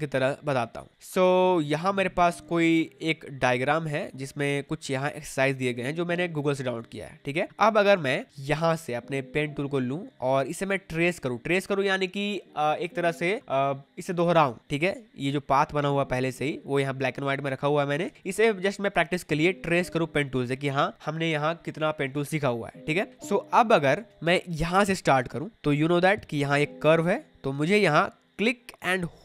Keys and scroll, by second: 7.8 space, 18.0 space, 24.1 space.